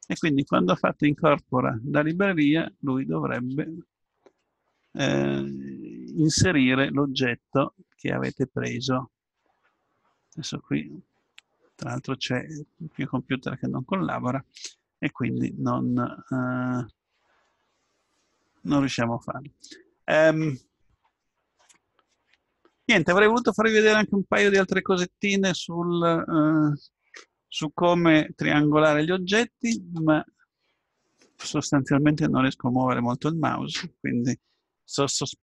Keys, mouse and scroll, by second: 0.0-1.6 drag, 1.6-4.2 middle drag, 7.0-8.9 middle drag, 15.6-28.8 middle drag.